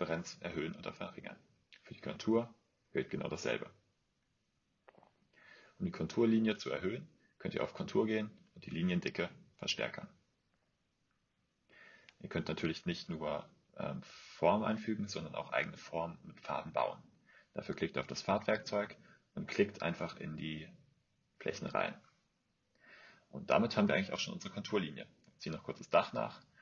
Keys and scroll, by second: 23.9 Escape, 24.3 Escape.